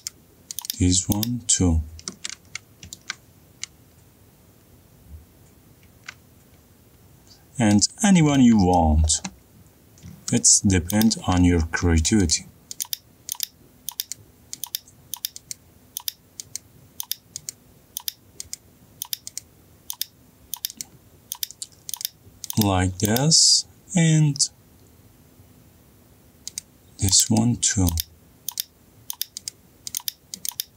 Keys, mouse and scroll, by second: 3.2 ctrl+click, 3.3 middle click, 8.3 middle click, 9.4 middle click, 10.1 shift+middle click, 12.9 shift+click, 19.4-30.7 shift+drag.